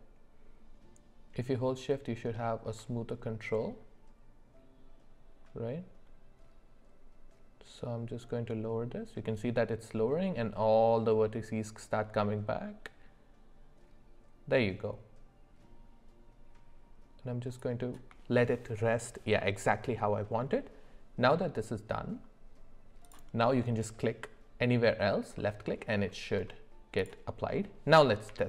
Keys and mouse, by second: 23.0 click, 25.4 middle click.